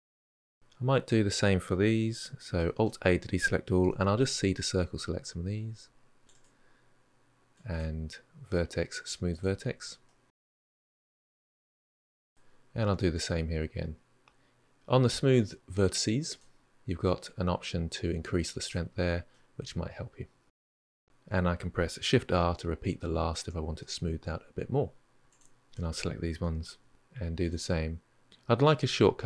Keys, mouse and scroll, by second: 0.1 drag, 0.3 shift+click, 2.5 alt+a, 3.6 c, 7.1-8.4 drag, 8.4-10.0 middle drag, 10.8 alt+a, 11.5 c, 12.9-16.1 drag, 16.8-19.1 drag, 19.1-22.1 middle drag, 22.1 shift+r, 22.7-23.2 middle drag, 23.2 Tab, 23.6-24.8 middle drag, 24.8 Tab, 24.9 middle click, 25.3 shift+click, 25.5 click, 25.6 shift+click, 25.7 shift+click, 25.9 shift+click, 26.4 shift+r, 26.8 ctrl+z, 27.5-29.2 drag.